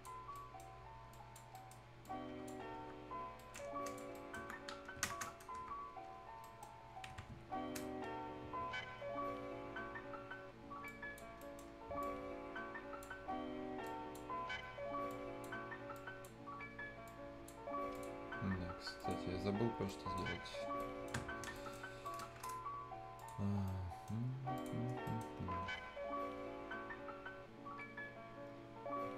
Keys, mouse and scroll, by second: 0.1 scroll down 1, 0.3 right click, 0.7-1.1 scroll up 1, 1.1 click, 1.5 right click, 2.0 click, 2.6 scroll down 1, 2.8 Tab, 3.0-3.3 scroll up 1, 3.3 right click, 3.6 scroll down 1, 3.8 click, 4.1 right click, 4.6-5.0 scroll up 1, 5.0 ctrl+space, 5.5 Tab, 6.2 scroll up 1, 6.4 right click, 7.9 ctrl+scroll up 1, 8.6 ctrl+scroll down 1, 9.2 ctrl+scroll up 1, 10.8 ctrl+click, 11.4 ctrl+right click, 12.0-13.5 ctrl+drag, 13.5 ctrl+scroll up 1, 13.8 ctrl+click, 14.3 ctrl+scroll down 1, 14.5-14.9 ctrl+scroll up 1, 15.0 click, 15.1-17.6 ctrl+drag, 17.6 ctrl+scroll down 1, 17.9 ctrl+click, 18.2 ctrl+scroll down 1, 18.9 ctrl+click, 19.3 ctrl+scroll down 1, 19.5-19.8 ctrl+scroll up 1, 19.8 ctrl+right click, 20.2-20.6 ctrl+scroll down 1, 20.7 ctrl+right click, 21.1 ctrl+Tab, 21.3 ctrl+scroll down 1, 21.5 ctrl+right click, 21.8 ctrl+scroll up 1, 22.0 ctrl+right click, 23.1 ctrl+click, 23.5 ctrl+scroll up 1, 23.6 ctrl+right click, 24.5 ctrl+click, 24.8 ctrl+scroll down 1, 25.0 ctrl+right click.